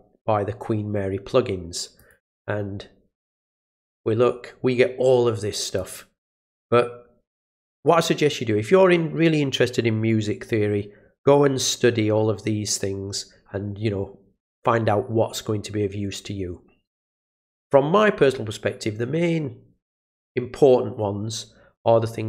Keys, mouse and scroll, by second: 2.0 click, 3.4 click, 5.7 click.